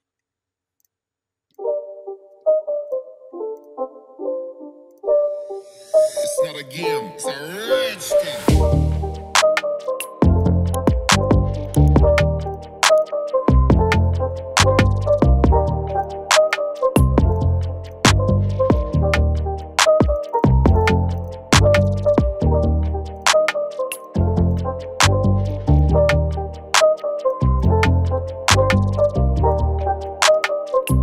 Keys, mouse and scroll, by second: 1.5 shift+click, 13.4 alt+scroll up 1, 14.2-14.7 scroll up 1, 16.0 double click, 20.3 double click, 30.4 double click, 30.8 0.